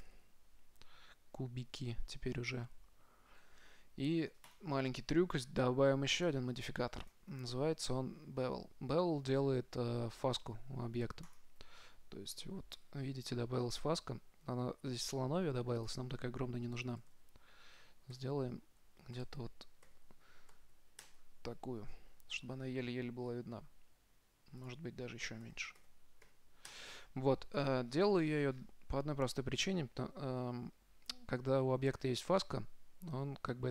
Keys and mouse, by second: 0.5 z, 4.7-9.0 drag, 13.1-16.0 middle drag, 16.0-17.8 drag, 22.7-26.4 middle drag, 24.9-26.7 drag, 27.9-33.0 middle drag.